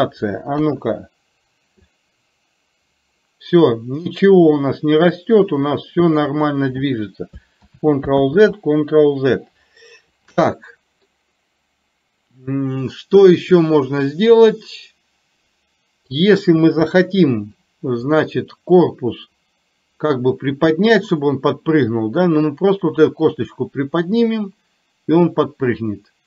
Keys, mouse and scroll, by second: 0.7 KP_1, 2.0-6.5 drag, 8.3 ctrl+z, 11.2-16.2 middle drag, 16.9 KP_3, 18.2 click, 21.3-26.2 drag.